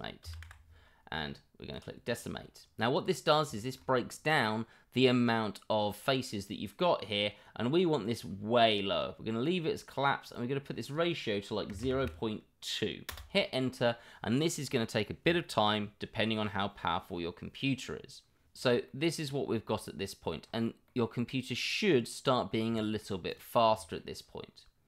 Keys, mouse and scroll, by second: 3.0-3.4 middle drag, 3.5 middle drag, 10.2-18.4 drag, 18.8-20.3 middle drag, 20.8-22.5 middle drag, 22.7 middle drag, 23.3 click, 23.8 middle drag.